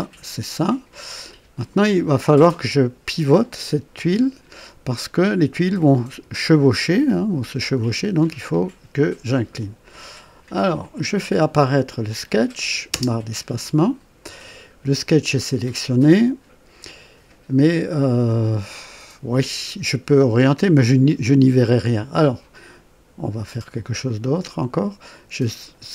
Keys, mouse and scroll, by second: 0.8 scroll up 1, 1.3 right click, 10.8 click, 12.0 click, 12.9 space, 25.0 click.